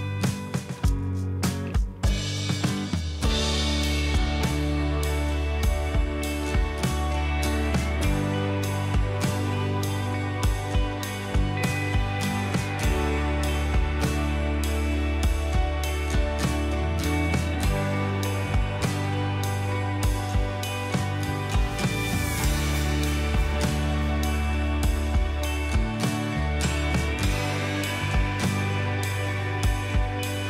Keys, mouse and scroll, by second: 9.2 right click, 16.7 double click.